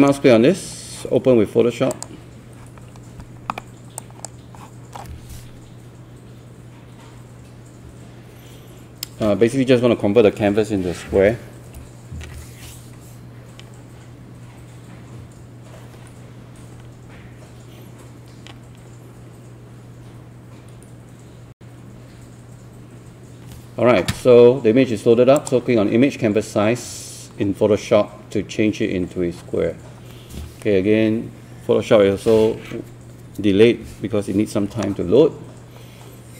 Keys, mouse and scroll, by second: 1.9 click.